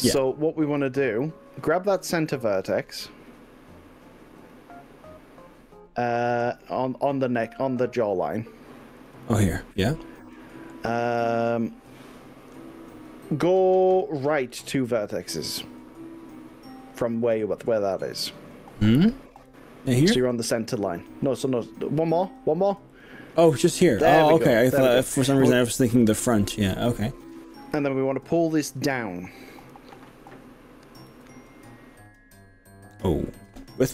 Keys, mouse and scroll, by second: 4.5 click, 9.0 click, 19.5 click, 22.3 click, 23.0 click, 29.7 g, 31.2 z.